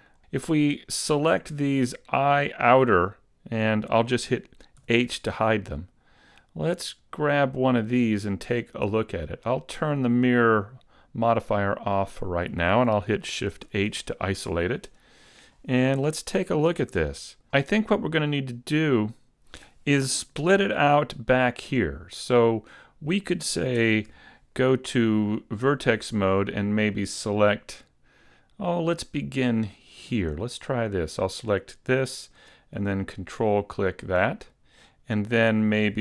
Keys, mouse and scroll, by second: 0.0 scroll up 6, 0.1 middle click, 0.8 right click, 4.9 h, 5.8 middle click, 7.1 right click, 11.4 click, 13.6 shift+h, 14.9 KP_Decimal, 16.0 Tab, 16.9 a, 21.0 middle click, 23.8 ctrl+Tab, 24.6 middle click, 25.7 middle click, 27.0 middle click, 30.1 right click, 30.7 middle click, 33.8 ctrl+right click, 34.4 middle click.